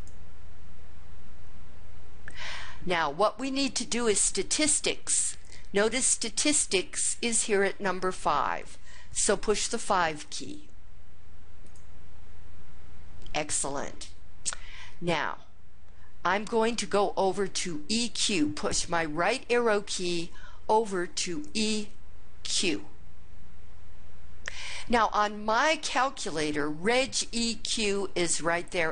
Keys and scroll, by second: 11.9 5, 22.7 ).